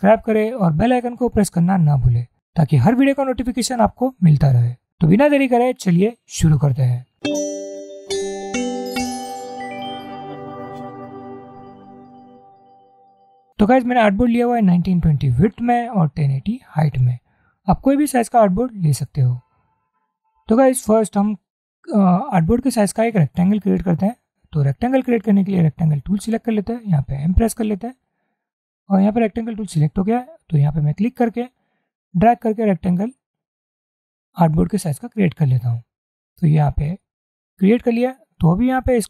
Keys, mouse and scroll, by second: 2.5 shift+click, 27.3 m, 31.9-34.7 drag.